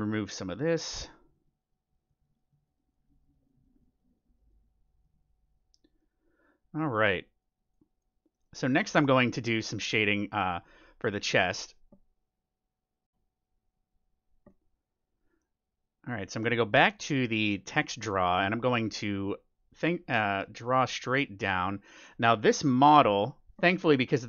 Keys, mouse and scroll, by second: 5.9-7.7 middle drag, 7.2-9.6 drag, 8.3-12.9 middle drag, 16.2-18.0 drag, 18.2-20.7 middle drag, 20.1-21.9 drag.